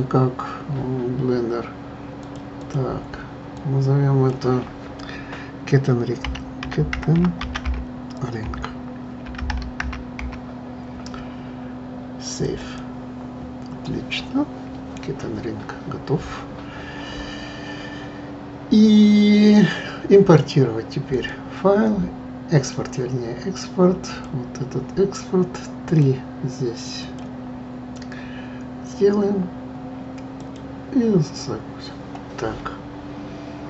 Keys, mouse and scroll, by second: 21.1-24.1 drag.